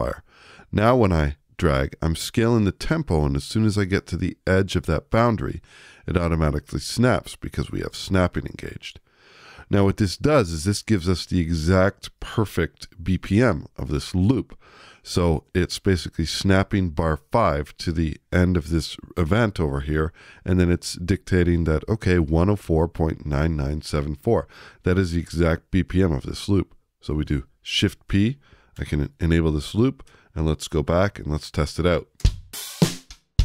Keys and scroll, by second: 27.2 shift+p, 28.7 /.